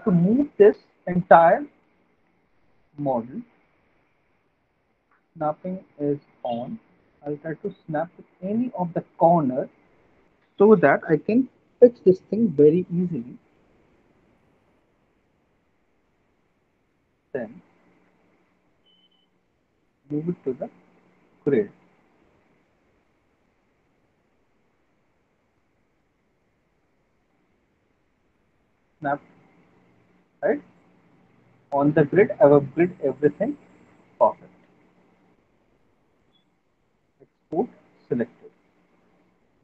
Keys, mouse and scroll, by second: 1.3 middle click, 1.5 alt+middle click, 2.3 alt+middle click, 4.3 middle click, 5.0 middle click, 8.0 click, 8.6 alt+middle click, 8.9 middle click, 9.3 middle click, 10.9 alt+middle click, 13.5 middle click, 13.8 middle click, 14.3 click, 14.8 middle click, 15.3 middle click, 16.0 alt+middle click, 16.0 alt+middle click, 16.4 middle click, 17.2 alt+middle click, 17.6 middle click, 18.0 alt+middle click, 21.3 click, 22.3 alt+middle click, 22.5 middle click, 23.0 middle click, 23.2 alt+middle click, 24.0 alt+middle click, 24.4 middle click, 24.6 middle click, 25.9 middle click, 28.5 click, 29.4 middle click, 29.4 click, 33.7 alt+middle click, 35.4 click, 37.7 click, 39.4 click.